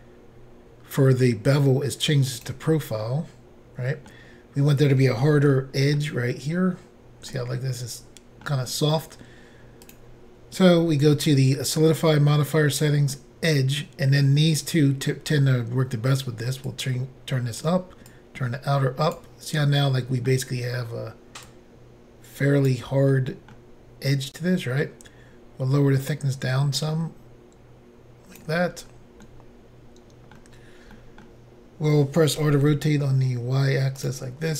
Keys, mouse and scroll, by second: 0.3 scroll down 2, 2.4 click, 2.5 click, 3.0 middle click, 5.5 shift+middle click, 6.4-7.2 scroll up 1, 7.3 middle click, 7.4 scroll up 1, 7.8 scroll down 1, 8.5 scroll up 1, 9.9 click, 10.0 click, 12.8 click, 12.9 click, 16.7 click, 18.1 click, 19.7 middle click, 21.5 click, 23.1 middle click, 26.1 click, 28.8-29.2 scroll down 1, 29.2 middle click, 30.9 middle click, 32.4 r, 34.0 typing, 34.0 click.